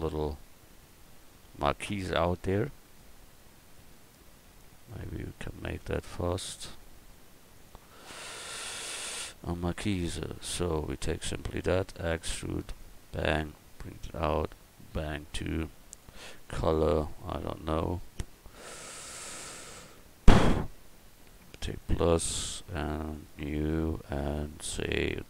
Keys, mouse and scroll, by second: 7.5 right click, 7.8 Tab, 8.5 right click, 9.9 right click, 10.7 right click, 11.8 e, 12.7 right click, 14.9 right click, 15.3-16.3 drag, 16.3 middle click, 16.5 click, 16.9-20.7 middle drag, 21.6-25.2 drag.